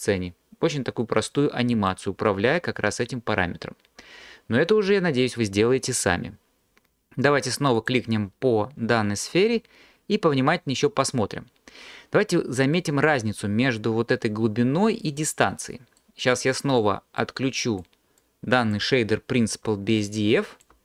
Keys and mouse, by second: 7.8 click, 17.3 click, 18.2 click, 20.0 alt+click.